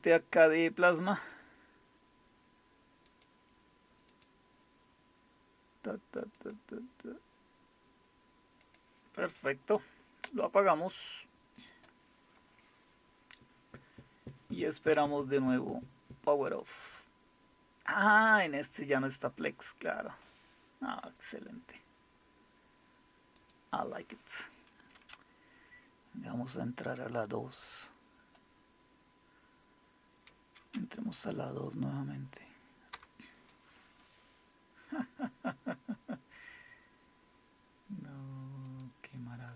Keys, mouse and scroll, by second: 1.0 click, 3.1 click, 4.1 click, 6.4 click, 8.6 click, 11.6 click, 23.4 click, 30.7 Up, 32.9 Return, 38.7 click.